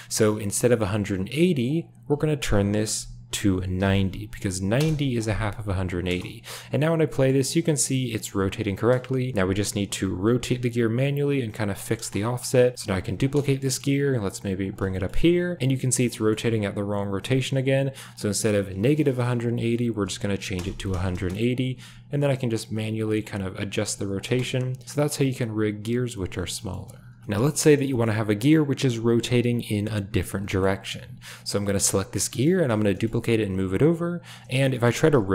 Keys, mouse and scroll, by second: 1.6-4.8 drag, 6.0 space, 7.1 shift+middle click, 8.6 space, 10.2 r, 11.9 space, 12.7 space, 12.9 shift+d, 13.5 shift+click, 13.5 middle click, 14.0 g, 14.9 shift+click, 15.5 g, 16.1 shift+middle click, 18.4-20.5 drag, 21.1 space, 21.7 r, 22.6 g, 23.8 r, 24.2 space, 26.1 shift+middle click, 26.5 shift+middle click, 27.0 ctrl+s, 27.2 space, 27.9 shift+middle click, 30.4 shift+middle click, 31.9 click, 32.3 click, 32.3 middle click, 32.7 shift+d, 34.8 r.